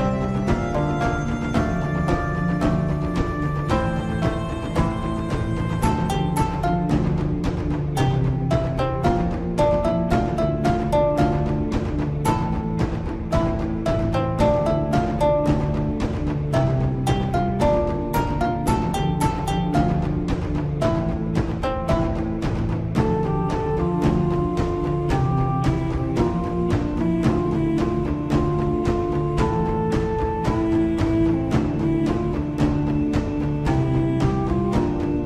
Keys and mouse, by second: 7.4 Tab, 9.9-11.2 drag, 13.4 click, 15.4 click, 17.3-18.9 drag, 21.9 ctrl+KP_Add, 25.9 r, 32.7 g.